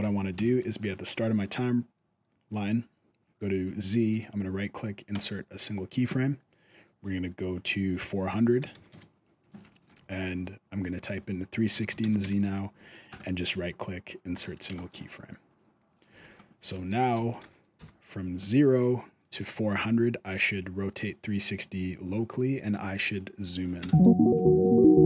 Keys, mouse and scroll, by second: 0.1 shift+Left, 3.9 right click, 6.0-6.9 scroll down 3, 7.4 click, 8.5 KP_0, 9.5 shift+middle click, 9.8-10.4 scroll up 2, 10.7 click, 12.9 right click, 14.5 shift+middle click, 14.9-15.4 scroll down 1, 15.4-15.9 scroll down 1, 15.9 alt+a, 16.1-16.9 scroll up 3, 16.9 shift+Left, 17.5 KP_0, 18.5-19.0 scroll up 1, 23.6 space.